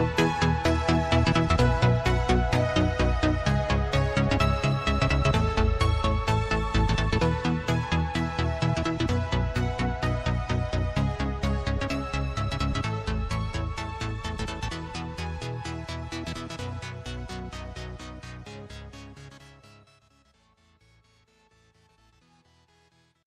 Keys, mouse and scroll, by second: 2.3 click, 3.3-3.7 scroll down 4, 3.7 click, 4.3 Tab, 4.7 click, 5.1 Tab, 6.1 click, 6.5-7.3 scroll down 6, 7.3 Tab, 8.0 click, 9.6 click, 10.0 Tab, 10.7 click, 11.6 click, 13.6 Tab, 13.9-14.6 scroll down 5, 14.6 Tab, 15.7 Tab, 16.2 click, 18.3-22.6 drag.